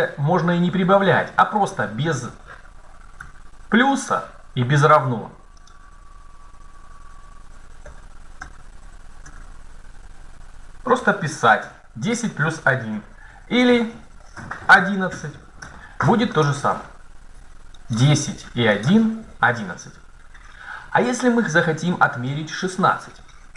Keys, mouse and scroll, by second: 3.0 Tab, 5.4 click, 7.6 Left, 8.2 BackSpace, 9.0 BackSpace, 10.8 Right, 11.4 BackSpace, 12.7 BackSpace, 13.1 BackSpace, 13.5 BackSpace, 14.5 KP_1, 15.4 Tab, 17.7 right click.